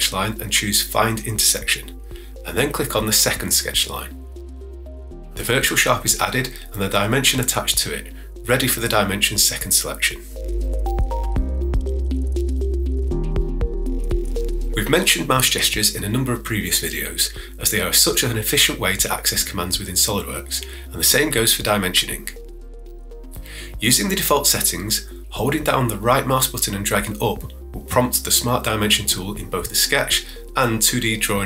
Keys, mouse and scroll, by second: 25.8-29.1 right drag.